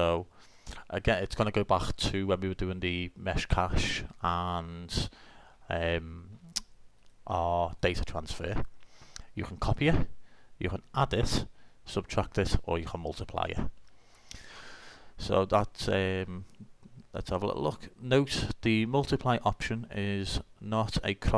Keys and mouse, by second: 7.0-10.4 drag.